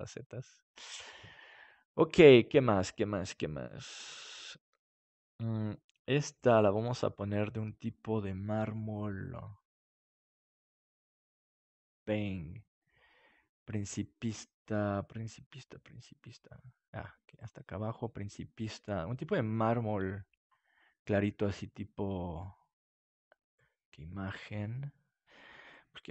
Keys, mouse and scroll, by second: 11.2-12.6 drag, 13.3 click, 20.5-22.2 drag.